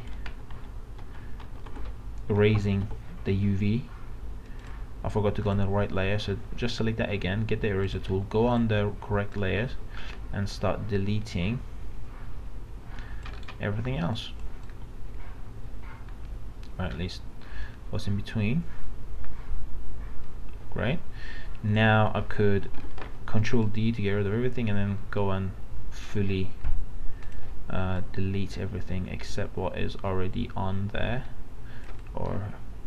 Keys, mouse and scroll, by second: 0.1 alt+z, 1.0 alt+z, 2.8 ctrl+d, 4.6-13.3 drag, 13.3 right click, 14.1-22.3 drag, 22.7 ctrl+d, 23.7-32.8 drag.